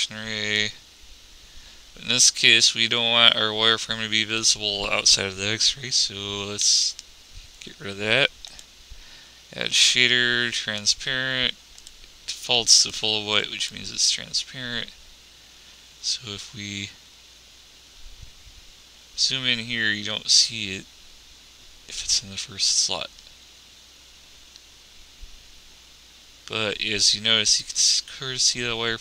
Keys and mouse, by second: 6.9 x.